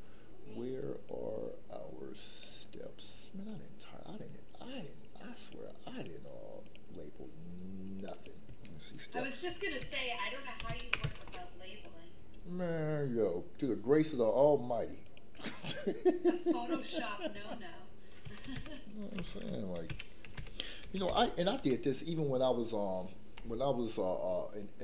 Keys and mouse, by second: 1.2-2.4 drag, 5.4 click, 5.9 click, 6.6 click, 7.9 click, 8.2-11.2 drag, 15.0 click, 16.7 click, 16.9-21.6 drag.